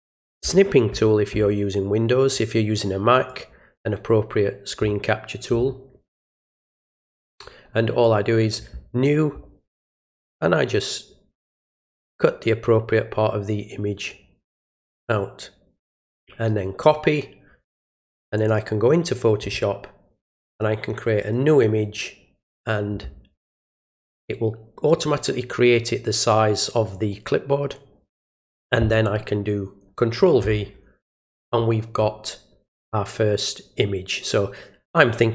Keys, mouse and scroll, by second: 3.2 click, 6.5 click, 8.0 click, 11.3-14.0 drag, 15.9 click, 16.7 click, 18.3 click, 20.4 click, 21.2 click, 26.9 click.